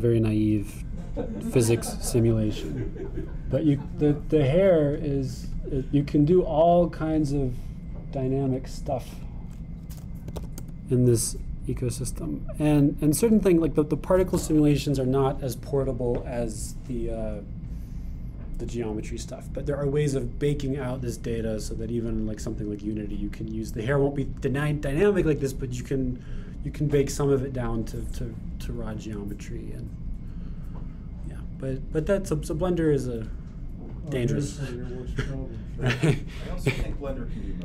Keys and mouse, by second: 2.1-3.3 drag, 6.2-9.6 drag, 10.2-14.7 drag, 16.9-18.3 middle drag, 28.0-29.4 middle drag, 31.2-32.3 drag, 34.8-37.1 drag.